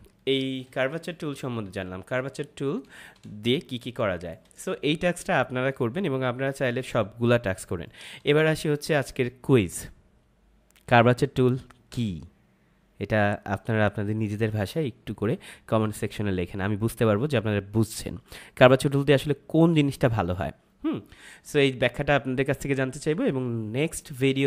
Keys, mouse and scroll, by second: 0.0 space, 0.2 click, 0.5 space, 1.0 click, 1.6 Delete, 2.3 ctrl+-, 3.2 space, 3.4 click, 3.7 space, 4.0 click, 4.1 space, 6.7 ctrl+-, 7.6 space, 7.8 click, 8.1 space.